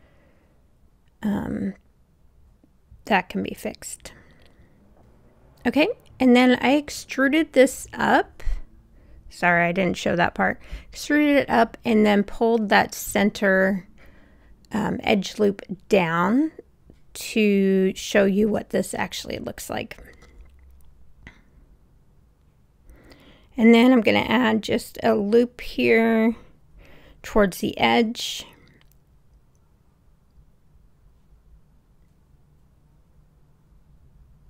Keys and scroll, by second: 8.4 super+z.